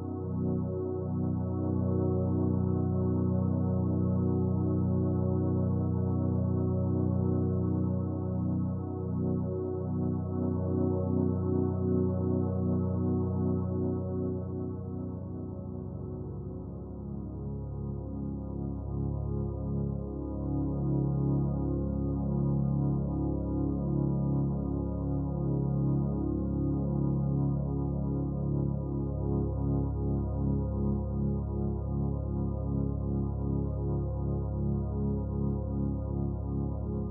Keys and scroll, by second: 1.0-1.4 typing, 4.0-4.8 typing, 10.6 d, 20.6-22.4 typing, 28.9-29.3 typing, 29.4 Return.